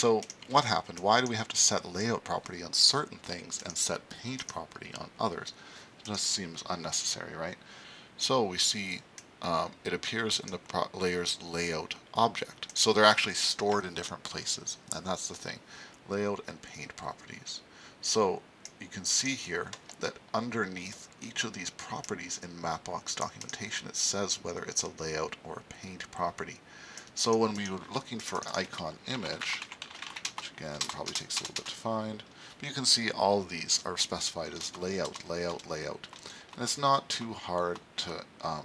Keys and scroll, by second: 0.2 super+s.